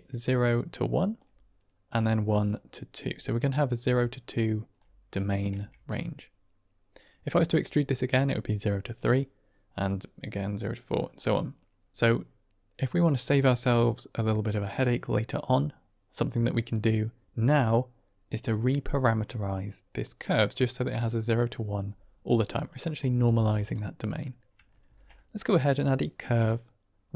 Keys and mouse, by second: 0.9 click, 1.1 d, 2.2-4.7 typing, 2.4 click, 3.8 click, 5.8 Tab, 22.7 drag, 23.1 g, 24.8 shift+a.